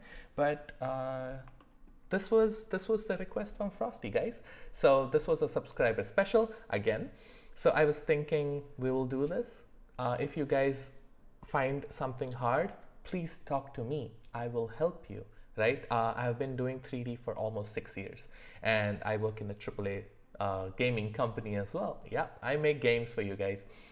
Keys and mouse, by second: 0.4 middle click, 1.6 shift+middle click.